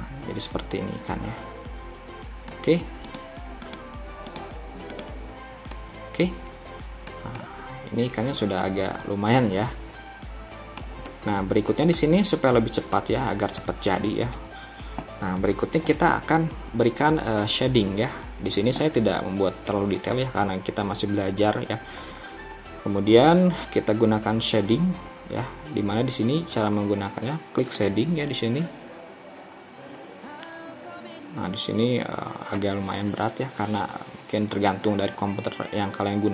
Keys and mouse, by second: 0.1-2.7 middle drag, 3.1-5.8 drag, 5.8-7.2 middle drag, 7.5-10.9 middle drag, 11.1 middle click, 13.0 middle click, 14.4 KP_3.